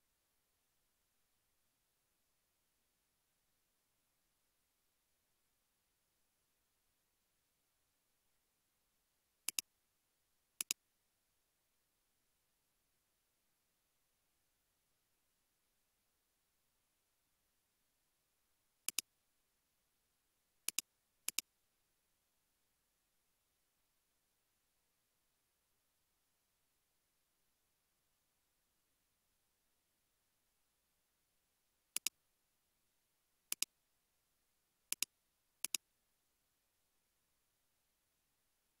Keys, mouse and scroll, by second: 2.6 space, 7.1 typing, 20.0 typing, 21.6-38.8 drag, 28.7-32.4 middle drag, 28.9 typing, 32.4 typing, 34.1 typing.